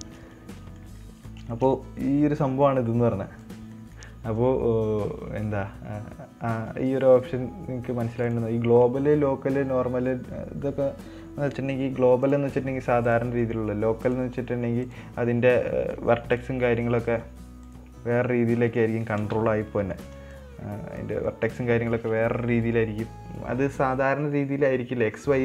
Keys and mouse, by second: 0.4 shift+middle click, 0.7 middle click, 1.4 middle click, 1.9 shift+middle click, 2.8 middle click, 3.3 right click, 4.1 middle click, 8.6-13.5 drag, 13.8 middle click, 14.4-15.6 drag, 16.7 click, 17.2 middle click, 18.0 click, 19.1 middle click, 20.7 click, 21.7 middle click, 22.4 Tab.